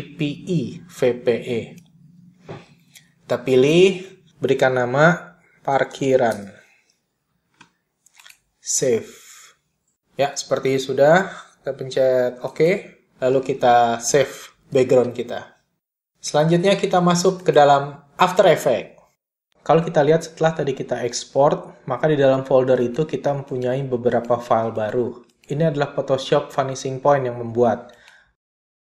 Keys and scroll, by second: 5.4-7.0 typing, 15.6 super+s.